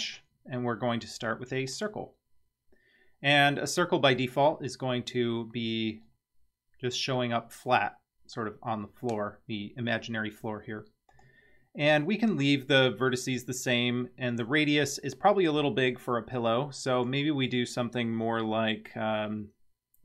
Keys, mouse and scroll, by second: 5.5-9.1 scroll up 6, 11.2 click, 16.9-20.0 drag.